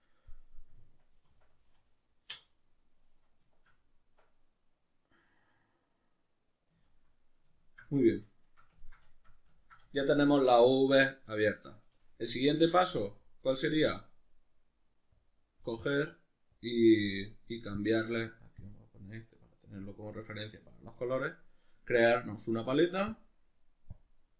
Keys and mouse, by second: 2.5-15.2 middle drag, 12.6 n, 15.2-19.3 drag, 19.3-23.1 middle drag, 23.1-24.3 drag.